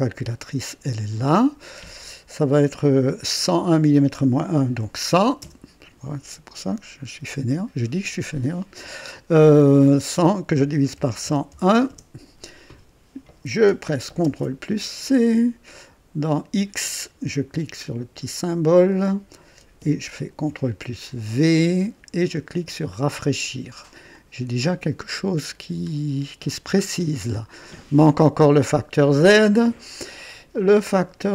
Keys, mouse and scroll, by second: 0.4 click, 4.7 KP_1, 5.0 KP_0, 10.5 KP_Divide, 10.9 KP_1, 11.2 KP_0, 11.4 KP_1, 11.8 Return, 14.2 ctrl+c, 16.7 click, 18.8 click, 20.2 ctrl+v, 21.1 ctrl+click, 22.8 click, 24.1-26.6 drag, 26.7-27.1 scroll up 1.